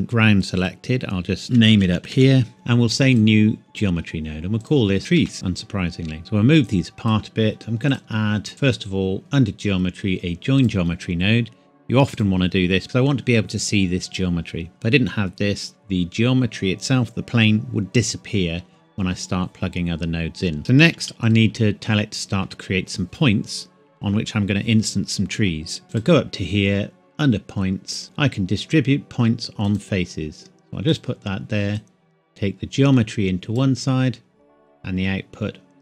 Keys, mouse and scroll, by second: 0.4 click, 1.4-2.1 typing, 2.5 click, 5.0 typing, 5.3 KP_Enter, 5.8-6.2 scroll up 1, 6.2 click, 10.6 click, 25.7 scroll up 1, 25.9 click, 29.7 click.